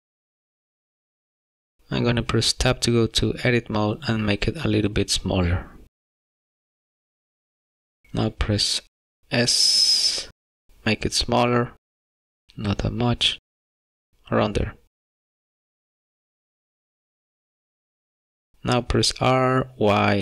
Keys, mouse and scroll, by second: 0.3 middle click, 1.2 scroll up 2, 1.9 middle click, 4.6 Tab, 6.3 a, 6.8 s, 9.5 s, 17.9 Tab, 19.3 y, 19.8 y.